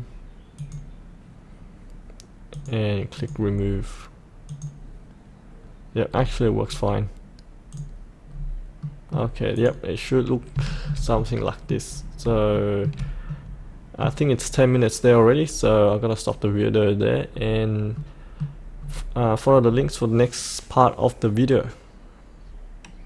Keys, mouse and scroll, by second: 6.1-7.6 scroll up 1, 7.6 click, 8.2-8.7 scroll up 1, 8.7 middle click, 9.5 click, 10.6 shift+middle click, 11.8-12.2 scroll down 1, 12.5 shift+middle click, 13.2-14.4 middle drag, 17.2-17.9 scroll up 1, 17.9 middle click, 18.8-23.0 scroll down 1.